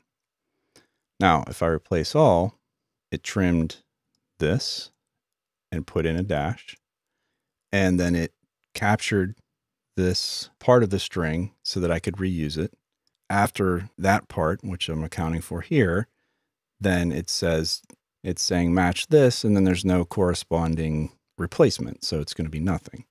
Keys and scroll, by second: 3.7-4.4 typing.